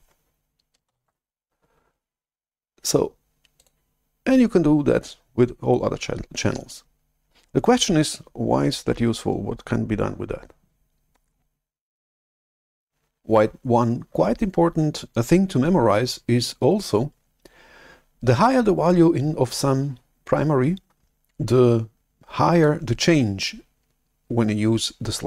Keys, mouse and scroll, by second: 0.9 shift+super+F11, 3.5-6.1 drag, 12.6 click, 22.6-25.2 drag.